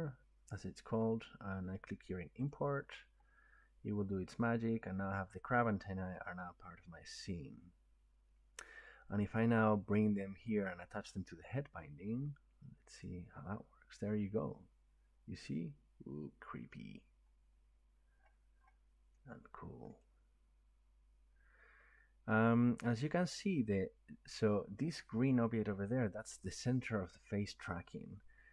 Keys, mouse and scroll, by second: 2.5 click, 6.2 click, 13.0 click, 17.7 scroll, 18.0-18.8 scroll up 18, 19.9 middle click, 21.0 scroll, 23.2 right click, 25.0-28.4 right drag.